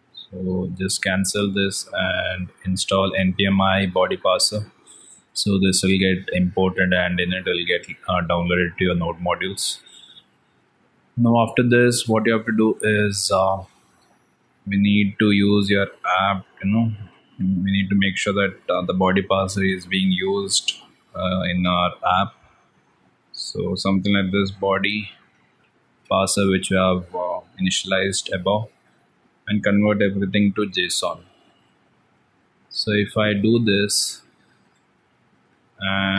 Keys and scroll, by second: 0.6 ctrl+c.